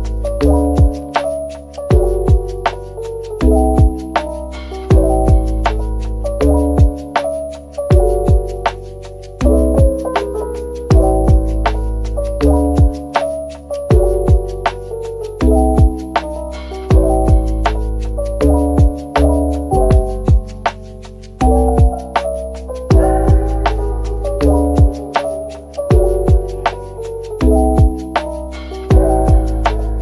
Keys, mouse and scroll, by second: 0.1 middle click, 1.3 typing, 3.2-3.5 typing, 6.4 typing, 7.7 middle click, 10.3 shift+click, 10.6 middle click, 13.1 middle click, 13.5-14.5 typing, 15.9 Tab, 16.5 middle click, 17.5 Tab, 18.3 ctrl+r, 18.9-19.6 scroll up 1, 19.6 double click, 20.0-22.4 typing, 23.0 alt+click, 24.4 middle click, 25.1 right click.